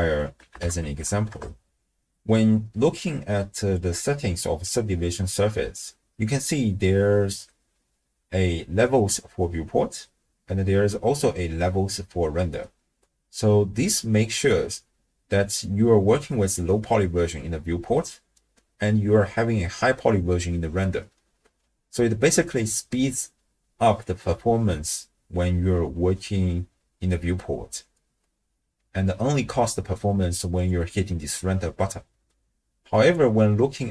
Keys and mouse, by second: 2.9 click, 30.6-31.5 drag, 33.0 click.